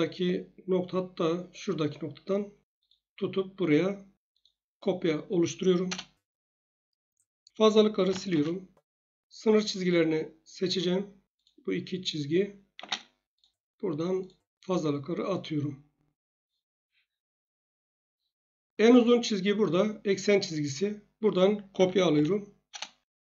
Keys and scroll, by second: 5.8 Return, 7.8-8.6 typing, 12.7 space, 16.8 Escape, 21.5-22.6 typing, 22.7 Return.